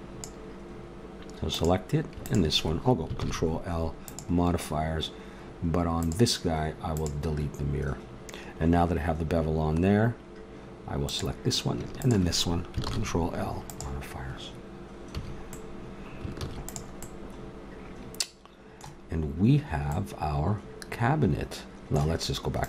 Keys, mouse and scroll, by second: 1.5-3.2 drag, 3.2 ctrl+l, 6.0-8.5 drag, 9.3-11.0 middle drag, 11.0 right click, 12.8 ctrl+l, 15.1 a, 16.4 ctrl+s, 19.0 middle click, 21.7 middle click.